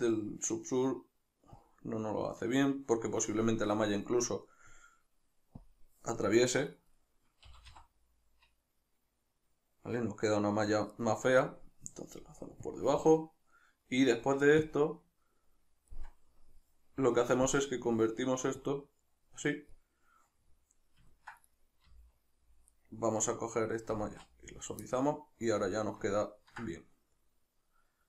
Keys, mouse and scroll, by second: 6.6 right click, 7.0-11.3 middle drag, 7.5 g, 11.3 right click, 12.7 click, 13.2-14.6 middle drag, 14.6-16.0 drag, 16.0-17.5 middle drag, 17.5-19.7 drag, 19.7-21.5 middle drag, 21.5 right click, 21.9 z, 22.7 right click, 23.9 z, 24.9-28.0 middle drag.